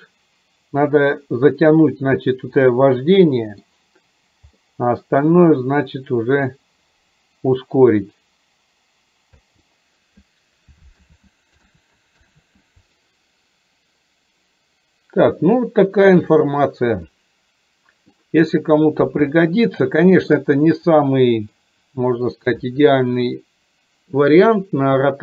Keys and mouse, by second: 2.7 middle click, 4.7 middle click, 9.5 space, 11.0 ctrl+z, 11.8 ctrl+z, 12.4 ctrl+z, 17.2 middle click, 19.5 shift+middle click, 21.0 middle click.